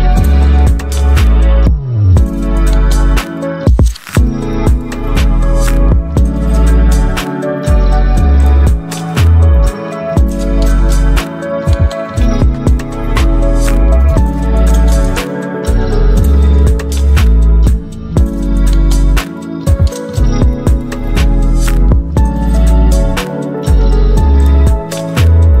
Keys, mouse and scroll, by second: 6.5 click, 7.9 right click, 8.6-20.2 drag, 21.6 click, 24.9-25.6 alt+drag.